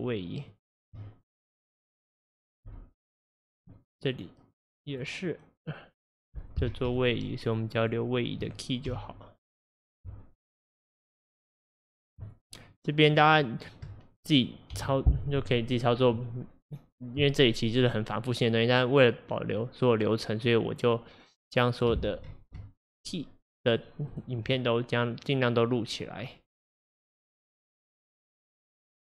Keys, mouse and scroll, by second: 2.7 Delete, 3.8 click, 4.9-6.5 drag, 6.9 shift+click, 7.2 shift+click, 7.5 shift+click, 7.8 shift+click, 8.2 shift+click, 9.0 Delete, 9.6 click, 10.8-12.1 drag, 12.3 shift+click, 12.7 shift+click, 13.1 shift+click, 13.4 shift+click, 13.6 shift+click, 14.8 Delete, 20.4 click, 21.9 click, 22.9-23.7 shift+drag, 24.1 shift+click, 27.7 shift+drag, 28.5-29.0 drag.